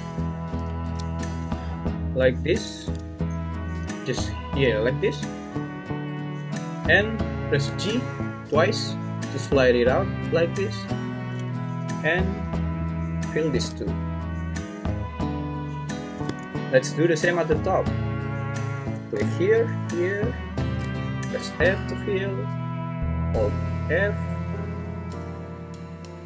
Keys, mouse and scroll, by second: 0.7 ctrl+z, 3.7 f, 7.6 g, 8.4 g, 13.6 f, 21.4 f, 22.5-24.7 f, 25.1 f.